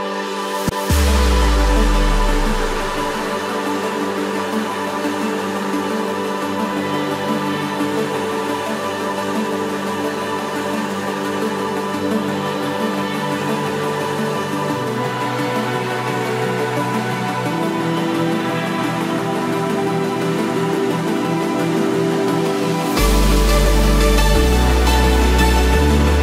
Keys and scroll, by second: 5.9 ctrl+-, 6.7 ctrl+=, 12.0 ctrl+-, 13.2 ctrl+=, 17.5 ctrl+-, 18.7 ctrl+=, 20.6 ctrl+-.